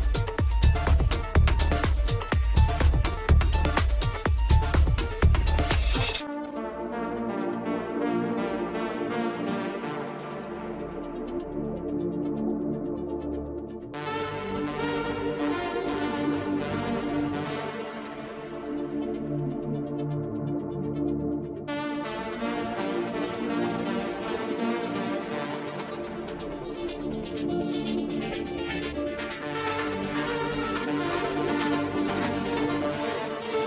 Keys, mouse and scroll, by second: 1.5-2.2 scroll up 3, 2.2 shift+click, 3.2 drag, 3.6 click, 4.7 shift+click, 4.9 shift+click, 5.2 shift+click, 5.6 shift+drag, 5.8 shift+drag, 6.1 shift+click, 6.5 shift+click, 6.6 shift+click, 7.1 shift+click, 7.3 shift+drag, 7.5 shift+drag, 7.8 shift+click, 8.2 shift+click, 8.4 shift+drag, 8.6 shift+drag, 8.9 shift+click, 9.6 ctrl+j, 11.2-11.7 scroll up 2, 12.0 click, 12.6 click, 12.9-16.0 drag, 17.7 click, 18.8-20.5 scroll up 1, 20.5 click, 22.1 click, 22.7-23.0 scroll up 2, 24.7 KP_1, 25.5 Tab, 25.9-26.4 scroll down 2, 28.2-29.9 middle drag, 29.9 click, 32.2-33.4 drag, 33.4 KP_0.